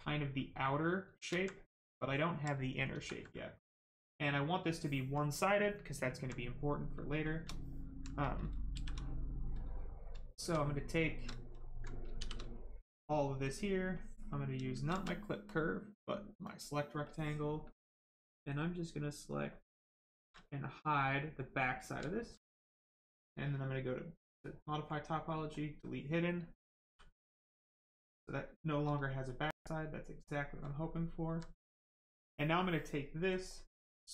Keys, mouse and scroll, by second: 1.3 alt+right click, 1.9 alt+right click, 2.9 ctrl+z, 4.1 right click, 4.7 alt+right click, 7.5 alt+right click, 8.7 shift+f, 8.9 right click, 10.1 shift+right click, 12.1 shift+d, 12.7 right click, 13.2 shift+right click, 20.3 alt+right click, 21.9 shift+right click, 22.7 shift+click, 27.2 right click, 30.9 alt+click, 31.5 right click, 33.3 click, 33.8 right click.